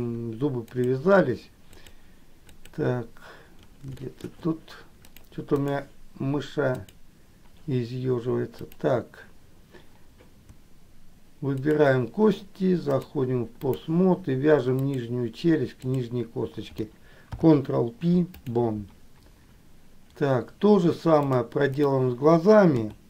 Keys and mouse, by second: 1.9 click, 2.7 click, 4.2 shift+middle click, 5.4 click, 6.9 click, 8.7 click, 11.7 shift+click, 13.2 click, 14.9 click, 16.0 click, 17.4 ctrl+p, 21.5 click, 22.9 KP_3.